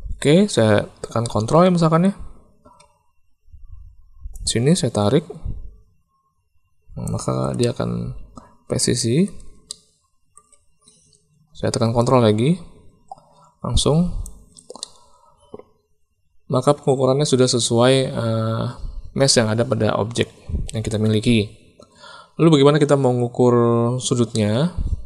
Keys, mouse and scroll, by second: 1.2 click, 4.3-7.0 ctrl+drag, 7.5-8.7 drag, 8.7 middle click, 9.6 shift+click, 12.0-14.2 ctrl+drag, 14.7-20.9 drag, 17.2-20.9 middle drag, 17.2-20.9 right drag, 24.3-25.0 middle drag.